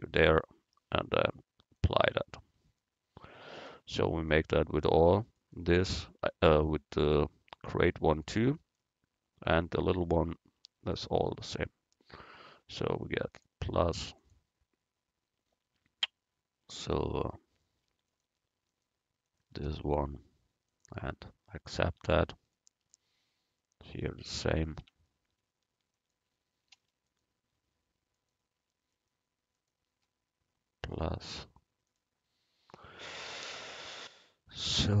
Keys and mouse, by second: 1.8-3.7 drag, 2.9 right click, 4.8 Tab, 10.1 Tab, 13.4-16.0 drag, 18.2-21.3 right drag, 20.8-22.6 drag, 21.9 Tab, 24.7-33.8 drag, 24.9 Tab, 31.0-32.0 right drag.